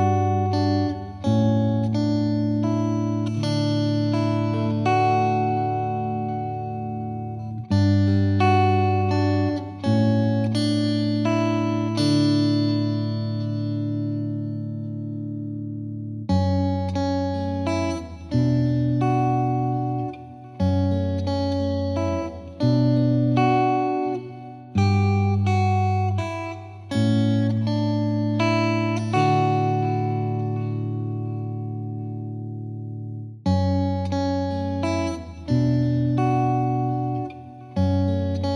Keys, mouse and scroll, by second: 0.3-5.5 drag, 5.5-5.9 scroll up 1, 5.9 KP_1, 6.2-6.8 shift+middle drag, 9.5 KP_1, 9.8 scroll up 4, 10.0 shift+middle drag, 10.2 z, 10.4-11.0 middle drag, 11.0 ctrl+2, 12.9-13.4 middle drag, 13.4 KP_1, 13.7-14.6 scroll up 2, 13.9 shift+middle drag, 14.6 g, 15.9 middle click, 16.1 z, 16.3 scroll down 5, 16.4-17.1 middle drag, 17.1 s, 18.8 click, 19.3 click, 19.5 scroll up 1, 19.6 middle drag, 19.9 scroll down 4, 20.2 Tab, 20.4 Tab, 20.8-23.9 middle drag, 23.9 scroll up 1, 24.1-24.6 middle drag, 24.6 s, 25.2-26.1 middle drag, 26.1 KP_7, 27.3 middle drag, 27.6 scroll down 1, 27.7-31.9 shift+middle drag, 32.3-34.4 drag, 34.8 middle drag, 35.0-36.0 scroll down 1, 36.0-36.4 scroll down 1, 36.4-38.2 shift+middle drag, 38.2 scroll up 1, 38.4-38.5 scroll down 1.